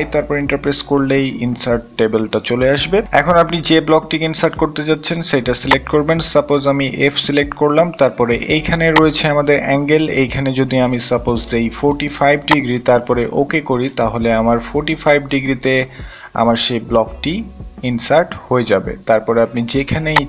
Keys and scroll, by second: 0.0-0.1 typing, 9.1-10.0 typing, 12.4-13.1 typing.